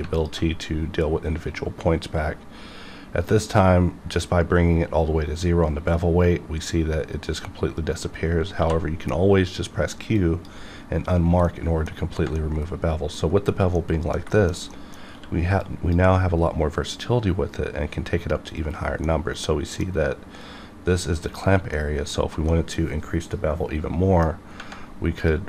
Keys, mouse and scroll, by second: 0.1 alt+click, 0.3 alt+click, 7.8 right click, 8.6 q, 10.1 click, 11.1-11.4 scroll down 1, 11.4 middle click, 12.3 middle click, 13.2-13.7 scroll up 1, 13.7 middle click, 14.7 middle click, 15.1 q, 15.6-18.4 drag, 19.2-21.2 middle drag, 21.2 click, 21.7 middle click, 22.1 scroll up 1, 22.5-24.5 middle drag, 25.2 click.